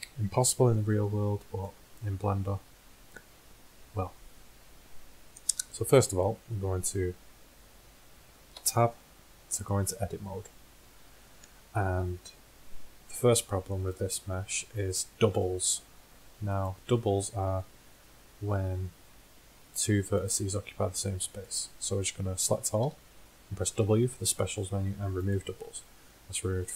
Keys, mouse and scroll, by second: 8.6 Tab, 16.6 middle click, 18.5 g, 20.8 g, 22.7 a, 22.9 a, 23.8 w.